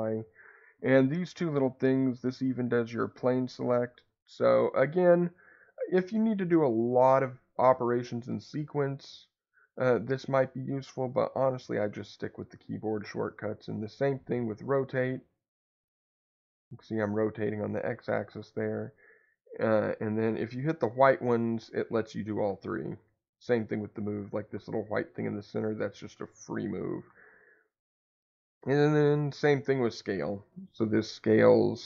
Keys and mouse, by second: 2.1-3.7 drag, 3.7 Escape, 13.6 click, 15.2-18.3 drag, 18.3 Escape, 20.6-22.7 drag, 22.7 Escape, 23.8 click, 25.2-27.0 drag, 27.0 Escape, 30.8-31.8 drag.